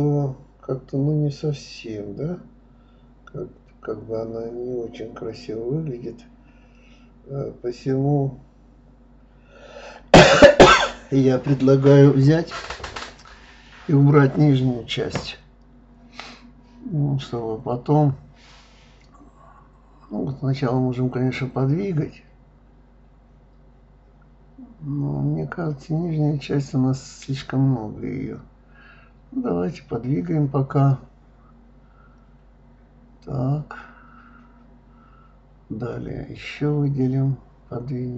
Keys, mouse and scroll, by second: 0.7-2.2 middle drag, 2.9 click, 3.8 click, 5.1 click, 6.3 click, 6.6 click, 6.9 click, 7.1-9.3 middle drag, 9.3 click, 10.0 click, 10.4 click, 10.7 click, 11.5-12.7 drag, 13.3 shift+click, 13.6 shift+click, 13.8-15.3 middle drag, 17.1 g, 21.4 ctrl+z, 22.0 click, 22.8 click, 23.4 click, 24.2 click, 25.0 click, 25.9 shift+click, 26.2 shift+click, 26.8 shift+click, 26.9 shift+click, 27.4 shift+click, 27.6 shift+click, 29.8 g, 33.5 click, 33.6 click, 34.0 click, 34.2 click, 34.6 click, 35.1 shift+click, 35.3 shift+click, 35.5-36.9 middle drag, 36.9 shift+click, 37.5 shift+click, 37.8-38.1 middle drag.